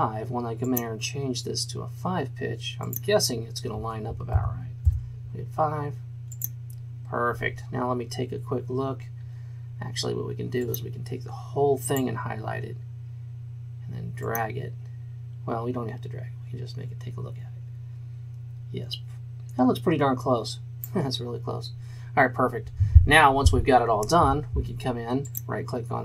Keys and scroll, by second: 4.5 KP_5, 4.8 Return.